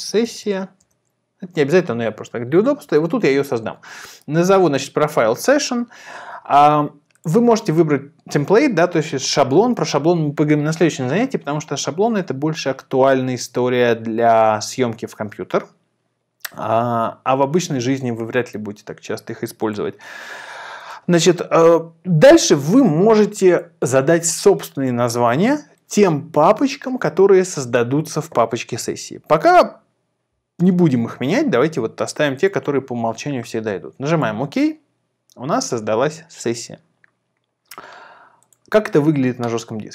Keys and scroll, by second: 0.0-0.9 typing, 2.8 Return.